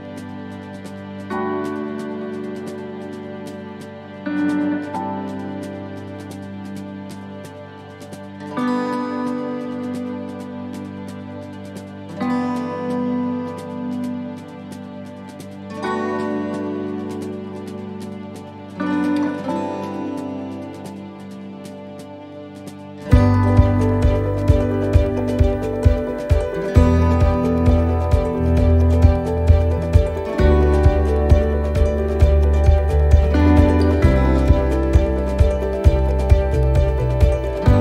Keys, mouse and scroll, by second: 0.1 shift+middle click, 0.9 scroll up 1, 1.4 shift+middle click, 5.0 click, 6.2 right click, 6.7 shift+right click, 7.2 right click, 7.7 right click, 8.4 click, 13.6 shift+middle click, 14.0 scroll up 4, 14.6 shift+middle click, 15.3-15.8 scroll down 3, 16.3 shift+middle click, 17.2 right click, 17.7 shift+right click, 18.3 right click, 18.8 shift+right click, 19.4 shift+right click, 20.0 shift+right click, 20.7 click, 23.1 middle click, 23.5 scroll down 4, 24.1 shift+middle click, 24.5 scroll down 2, 25.0 middle click, 25.6 shift+middle click, 25.9 scroll up 4, 26.3 shift+middle click, 26.8 scroll up 2, 27.2 shift+middle click, 28.7 middle click, 29.7 right click, 31.4 click, 32.3 right click, 32.9 right click, 34.8 ctrl+r, 36.6 right click.